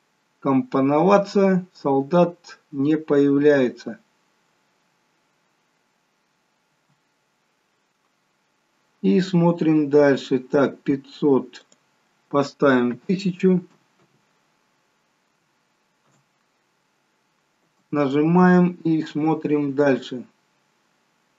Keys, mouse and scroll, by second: 6.8 space, 8.7-10.6 scroll up 3, 11.6 click, 14.0 0, 17.7 space.